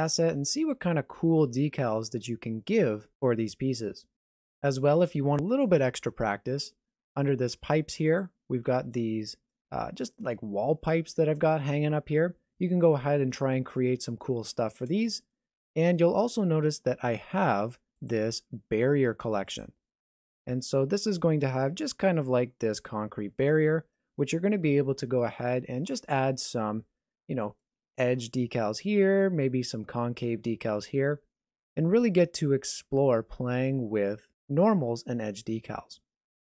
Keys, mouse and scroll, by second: 8.1 click, 8.6 scroll down 4, 9.1 shift+middle click, 9.7 middle click, 13.4-15.6 scroll up 2, 15.8 shift+middle click, 16.4 middle click, 18.0 click, 19.6 click, 20.2 middle click, 21.1 shift+middle click, 21.9 middle click, 27.0 middle click.